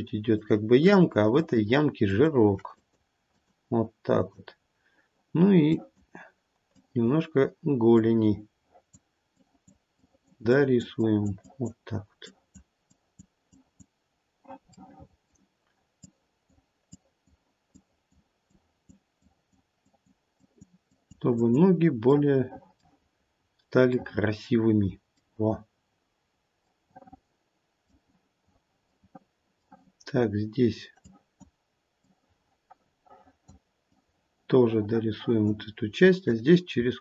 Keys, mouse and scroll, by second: 0.3 ctrl+click, 0.8 ctrl+click, 1.4 ctrl+click, 2.1 ctrl+click, 2.7 click, 3.3 click, 4.2 click, 5.7 click, 6.6 click, 7.9 click, 9.3 click, 10.0 click, 10.5 click, 10.9 click, 11.4 click, 12.2 click, 12.9 click, 13.5 click, 14.6 middle click, 16.0 click, 16.9 click, 17.6 click, 18.5 click, 19.2 click, 19.8 click, 20.3 click, 20.8 click, 21.3 click, 23.4-24.3 scroll down 2, 23.9 middle click, 25.4-26.1 scroll down 1, 26.1-26.5 scroll up 1, 26.6 middle click, 28.8 middle click, 29.0 middle click, 29.8-31.1 scroll up 1, 31.1 click, 31.1-32.2 scroll up 2, 32.2 click, 33.8 click.